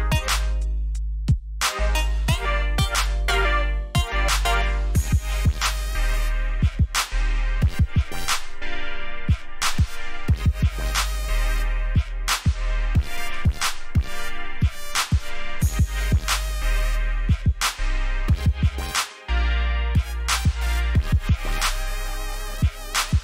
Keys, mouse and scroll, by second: 1.0 scroll down 1, 1.3-2.3 scroll up 3, 2.8-3.8 alt+scroll down 3, 4.2 alt+scroll down 1, 4.8 alt+scroll up 1, 6.0 ctrl+Num_Lock, 6.4 ctrl+shift+s, 10.6 click, 22.3 click.